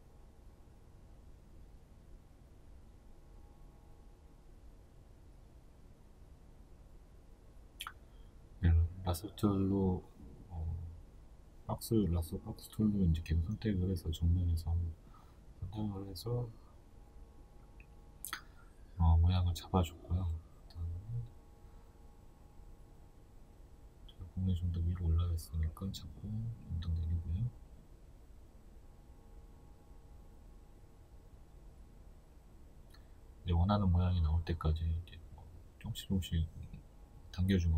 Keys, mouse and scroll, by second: 2.1 right click, 3.7 b, 6.3 click, 6.8 right click, 8.1 b, 11.0 click, 15.6-22.4 shift+middle drag, 22.4 right click, 24.8 b, 27.2 click, 27.5 right click, 29.3 b, 31.3 click, 31.7 right click, 33.2 b, 36.4 right click, 37.5 b.